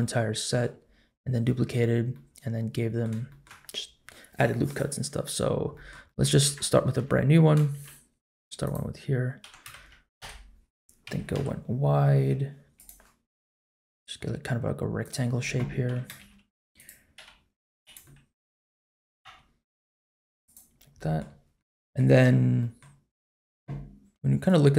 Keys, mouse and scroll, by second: 0.0 middle click, 0.9 scroll down 1, 2.1 middle click, 3.3 shift+middle click, 5.4-5.9 scroll down 2, 5.7 middle click, 6.0 shift+middle click, 6.9 Tab, 7.7 shift+a, 9.4 g, 10.0 middle click, 10.0 scroll down 7, 10.0 KP_Decimal, 10.2 KP_7, 11.0 s, 13.3 s, 15.9 g, 17.1 s, 18.0 middle click, 19.0 s, 20.7-21.2 scroll up 2, 21.0 middle click, 21.3-21.9 scroll down 2, 21.6 middle click, 22.2-22.6 scroll up 1, 22.6 middle click, 23.1-23.5 scroll up 1.